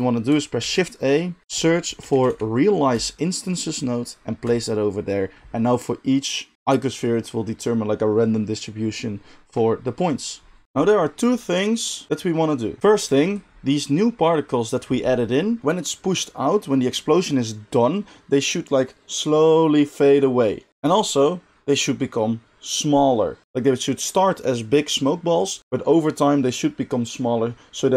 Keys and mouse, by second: 0.0-10.6 middle drag, 0.6 shift+a, 10.6-27.9 drag.